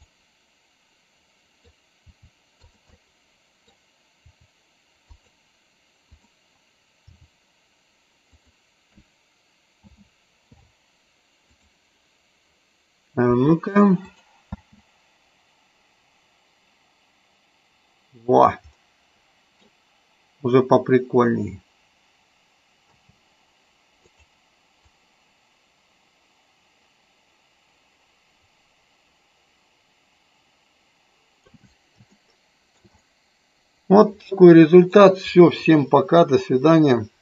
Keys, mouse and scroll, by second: 0.0-1.5 middle drag, 3.0 middle click, 6.0 click, 8.2 click, 9.7 a, 14.1 click, 18.6 middle click, 25.0-31.4 drag, 32.1 shift+middle click, 33.0-34.7 middle drag.